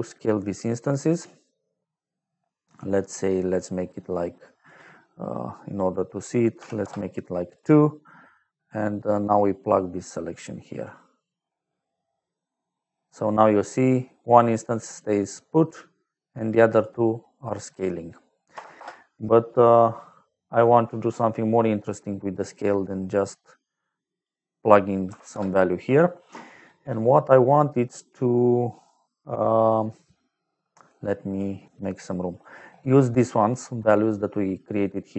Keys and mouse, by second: 3.0 click, 4.6 click, 5.2 click, 6.5 KP_2, 6.7 Return, 9.7 click, 11.9 middle click, 13.4 middle click, 14.9 click, 17.4 click, 18.5 KP_0, 18.7 Return, 20.2 middle click, 21.2 middle click, 23.7 click, 25.0 KP_1, 25.2 Return, 27.1 middle click, 30.1 middle click, 30.7 click, 31.6 g, 32.2 click, 32.9 middle click.